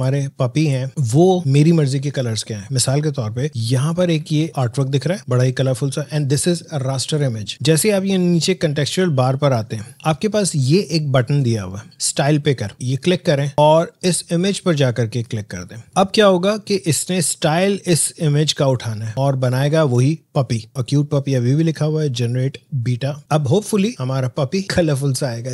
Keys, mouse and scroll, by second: 1.1 click, 4.1 alt+Num_Lock, 4.1 click, 4.3 alt+scroll down 1, 4.5 alt+scroll up 1, 4.6 space, 4.8 click, 5.2 space, 5.6-7.5 drag, 12.7 click, 13.8 click, 15.1 click, 23.2 click.